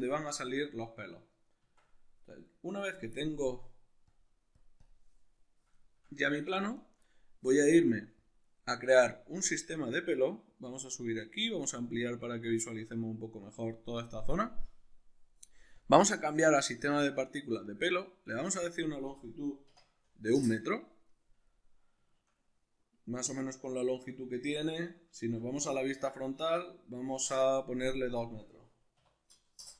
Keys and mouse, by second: 1.6 Tab, 3.5-5.8 drag, 5.8-8.2 shift+middle drag, 8.2 click, 9.1-15.8 drag, 18.7-21.5 drag, 20.4 Return, 21.5-27.9 middle drag, 24.5 alt+q, 27.9-29.7 drag, 29.6 Return.